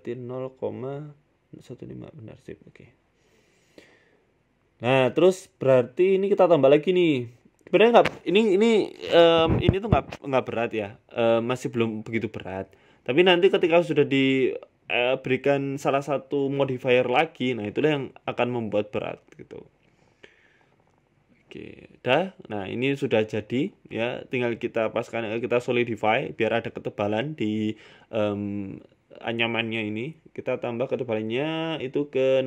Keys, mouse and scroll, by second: 2.3-4.0 scroll down 5, 2.6-4.0 scroll up 1, 4.0 scroll down 1, 4.0 g, 9.3 click, 9.7 click, 11.0 click, 12.0-12.4 scroll up 8, 12.4 scroll down 2, 12.4 scroll up 1, 13.4 click, 13.8 click, 14.7 shift+click, 16.6 click, 18.5 click, 20.7-22.0 scroll down 8, 22.0 middle click, 22.0 scroll down 1, 23.6 click, 25.1 click, 25.4 middle click, 25.9 scroll down 2, 25.9 scroll up 6, 26.2 scroll down 1, 27.0 shift+middle click, 28.6 click.